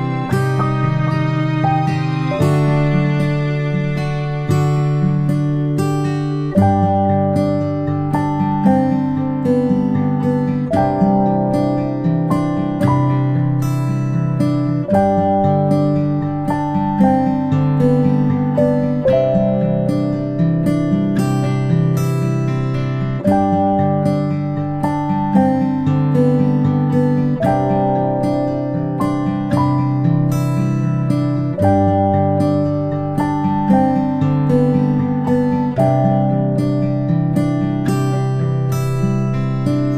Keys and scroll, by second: 23.3-24.2 ctrl+space.